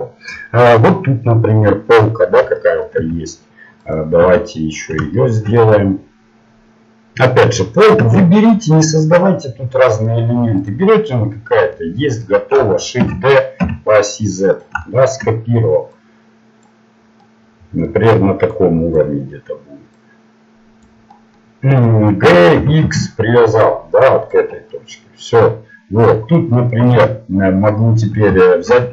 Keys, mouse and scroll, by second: 3.9 Tab, 4.2 Tab, 8.9 ctrl+Tab, 10.6 right click, 13.0 shift+d, 14.8-15.9 middle drag, 15.9-17.6 drag, 17.6 middle click, 18.5-21.7 drag, 21.1-22.3 middle drag, 22.3 g.